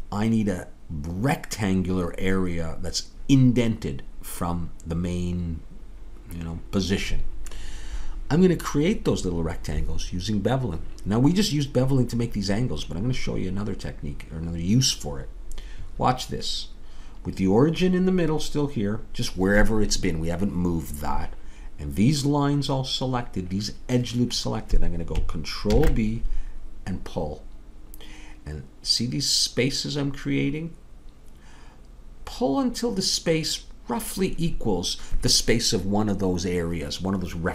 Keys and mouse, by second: 25.7 ctrl+b.